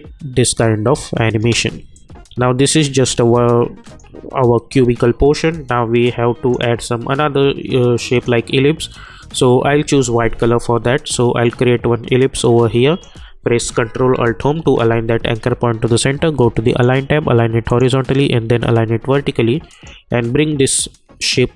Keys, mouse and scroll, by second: 1.4 space, 1.9-3.8 drag, 6.0-14.3 drag, 14.3 ctrl+alt+Home, 16.6-21.5 drag.